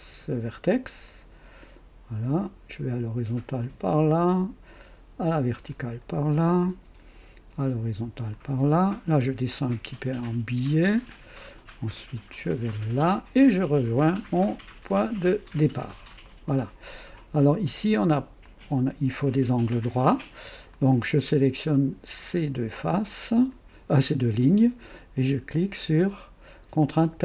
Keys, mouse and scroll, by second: 1.0 click, 3.5 click, 5.6 click, 8.2 click, 10.9 click, 12.9 click, 15.2 click, 16.2 right click, 17.1 right click, 18.4-19.4 drag, 20.6 click, 22.1 click, 23.4 click, 26.7 click.